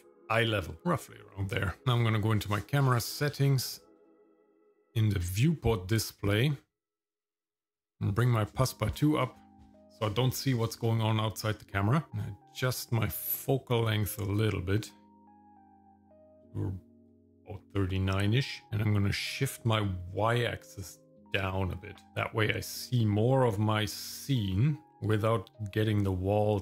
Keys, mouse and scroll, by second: 1.9 click, 3.1-3.9 scroll up 4, 4.9 click, 7.4 click, 12.1-14.7 shift+drag, 19.5 click, 21.4-25.2 drag.